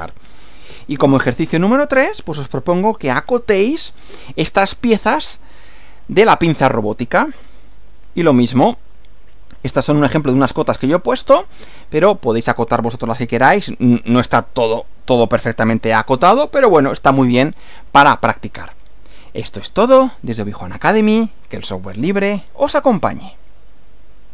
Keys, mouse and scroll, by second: 0.7 Right, 23.5 click.